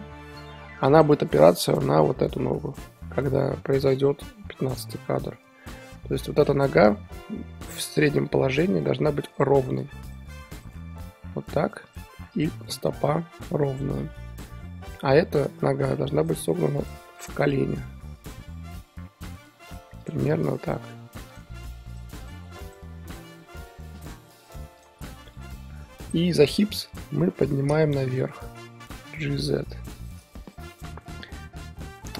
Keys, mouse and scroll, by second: 1.0 click, 1.1-3.0 middle drag, 3.0 KP_3, 4.3-7.1 drag, 7.1 r, 8.5 r, 9.3 r, 10.6 click, 11.0 r, 12.4 click, 12.6 r, 14.9 click, 15.5 click, 16.2 click, 16.4 r, 17.2 click, 17.3 r, 18.7 r, 20.0 click, 20.2 r, 21.4 click, 21.5 r, 22.2 click, 22.4 r, 23.1 click, 23.3 r, 24.8 click, 24.9 r, 25.9-27.0 middle drag, 27.0 click, 27.2 KP_3, 27.6 scroll up 2, 28.9 g, 30.5 drag, 30.7 r.